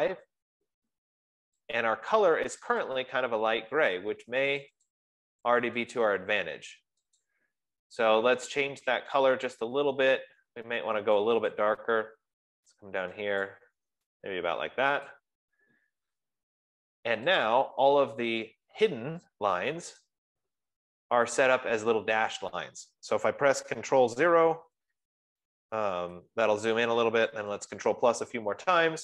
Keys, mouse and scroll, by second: 0.0-0.1 typing, 0.4 Tab, 2.2 click, 3.2 click, 3.5 click, 5.1 click, 5.5 click, 6.6 click, 7.8 click, 8.6 F15, 9.6 click, 10.0 click, 11.9 click, 13.9 click, 15.5 click, 17.8 click, 20.5 click, 25.1 ctrl+=, 26.5 ctrl+0, 27.9 ctrl+=, 28.4 ctrl+=, 28.8 ctrl+=.